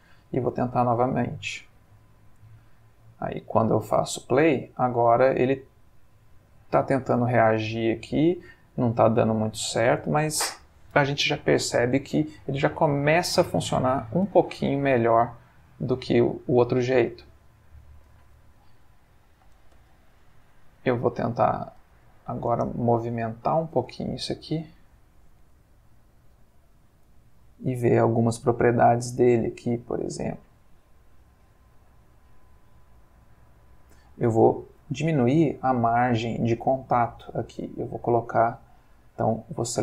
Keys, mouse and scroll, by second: 0.5 space, 14.3 Escape, 15.3-17.7 middle drag, 18.1-18.8 drag, 19.1 g, 19.8 shift+Escape, 20.4 click, 21.8 g, 22.5 space, 23.0-24.0 middle drag, 24.1-24.8 ctrl+middle drag, 27.0 click, 31.4 middle click, 33.0 click, 36.0 shift+middle click, 37.6 click, 38.8 Escape.